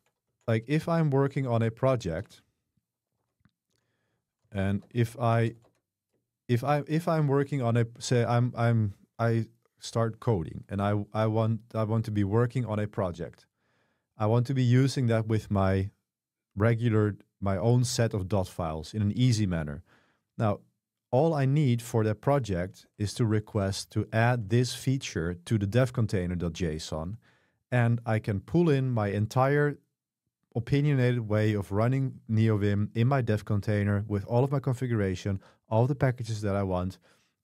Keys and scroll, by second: 0.3 shift+;, 1.5 Return, 2.2 ctrl+b, 3.2-6.1 typing, 6.1 Return, 22.9 Escape, 23.2-25.0 typing.